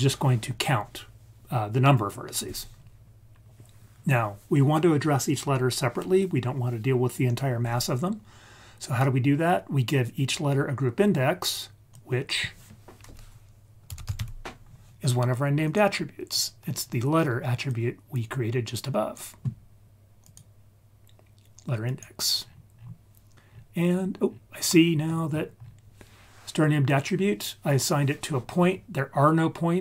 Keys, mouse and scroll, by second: 8.4-11.5 scroll up 1, 11.8-15.7 drag, 16.3 click, 16.8-17.6 scroll up 2, 17.6-19.1 drag, 20.2-22.0 drag, 22.3-23.2 scroll down 3, 23.3-24.0 scroll up 5, 24.2-24.6 scroll down 2, 24.6 middle click, 25.3-26.8 scroll up 3.